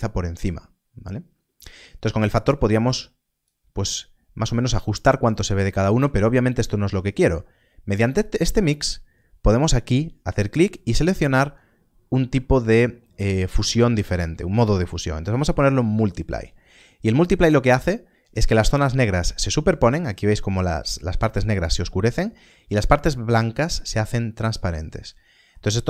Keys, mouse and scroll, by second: 2.2 middle click, 4.8 click, 5.5 click, 8.2 click, 15.9 click, 19.3 click, 19.6 middle click, 23.3 middle click, 23.9 scroll down 1, 25.0 middle click.